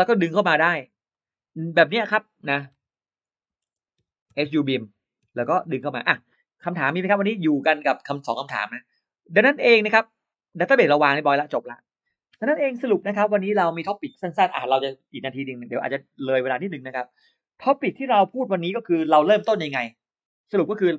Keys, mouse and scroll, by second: 0.9 click, 2.6-6.1 typing, 3.6 Caps_Lock, 6.6 click, 7.6 click, 7.8 click, 9.6 click, 10.3 click.